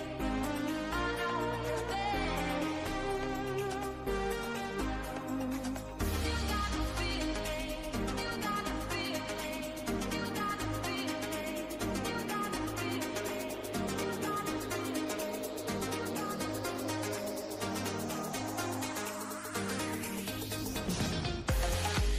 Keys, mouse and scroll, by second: 0.3 click, 0.9 shift+middle click, 1.2 click, 2.8 shift+click, 4.6-5.8 drag, 10.0-14.3 drag, 16.6-17.8 drag, 17.8 Tab, 18.3-19.9 middle drag, 19.9 Tab, 20.3-21.6 middle drag, 21.6 w.